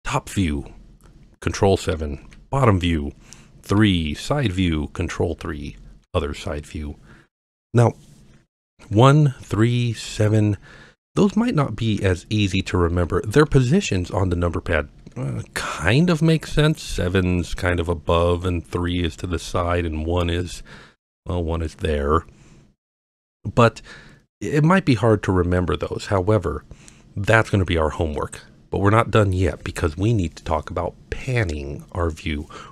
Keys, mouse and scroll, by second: 1.9 KP_7, 3.8 KP_3, 5.5 KP_3, 8.8-17.0 typing, 18.9 KP_3, 20.3 KP_1, 25.6-26.2 middle drag, 26.9-27.3 scroll up 1, 27.5-28.2 middle drag, 28.6-29.9 scroll down 2, 29.9-30.6 scroll up 1.